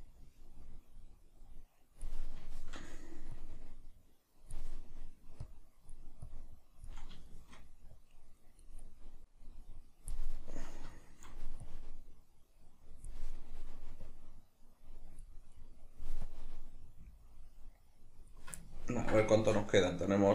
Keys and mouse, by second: 2.4-3.3 shift+middle drag, 3.3-4.9 drag, 4.9-5.5 middle drag, 5.5-7.3 drag, 7.3-7.9 shift+middle drag, 7.9-8.9 drag, 8.9-9.2 middle drag, 9.2-10.7 drag, 10.7-11.7 middle drag, 11.7-13.4 drag, 13.4-14.1 middle drag, 14.1-15.5 drag, 15.5-16.3 middle drag, 16.3-18.6 drag, 18.6-20.3 ctrl+middle drag.